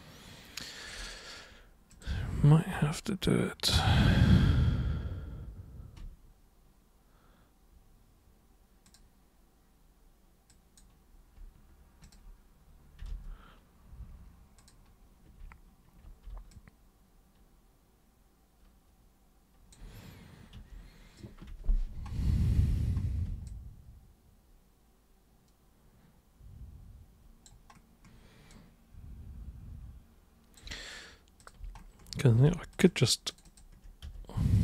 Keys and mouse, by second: 1.9 super+click, 8.8 super+click, 10.4 super+click, 12.0 ctrl+super+click, 14.5 super+click, 16.5-19.7 alt+super+drag, 20.5 super+3, 22.4 super+1, 23.5-27.4 alt+super+drag, 28.5-30.5 alt+super+drag, 31.4 super+click, 32.7 ctrl+shift+super+click, 32.8 ctrl+shift+super+click, 33.3 ctrl+shift+super+click, 34.0 ctrl+super+z, 34.5 ctrl+shift+super+click.